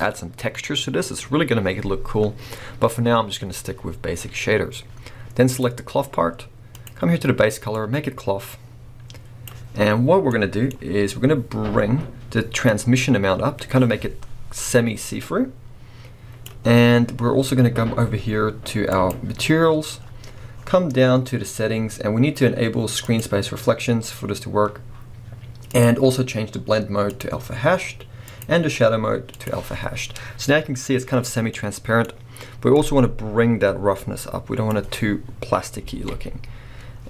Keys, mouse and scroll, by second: 12.9-21.1 drag, 21.1 scroll down 1, 24.0 click, 27.3-31.6 drag, 30.4-31.6 scroll up 2, 31.6-33.0 middle drag, 33.0-37.0 drag, 35.5-35.9 scroll down 2, 35.9 alt+a.